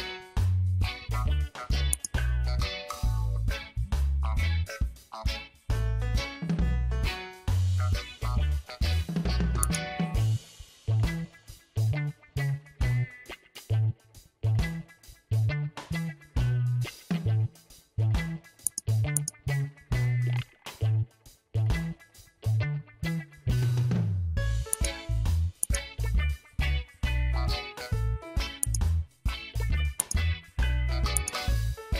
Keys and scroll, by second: 0.2 ctrl+t, 4.5 Return, 6.3 ctrl+j, 8.2 ctrl+t, 16.1 Return, 22.7 ctrl+j.